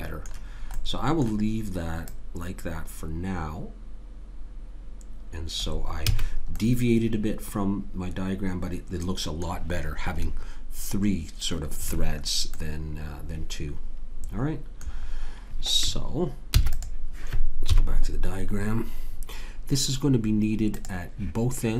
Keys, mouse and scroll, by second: 0.9-3.7 middle drag, 2.1 click, 2.1-3.7 right drag, 6.1 a, 6.2 middle click, 12.5-14.5 middle drag, 16.5 ctrl+s, 17.7 KP_3.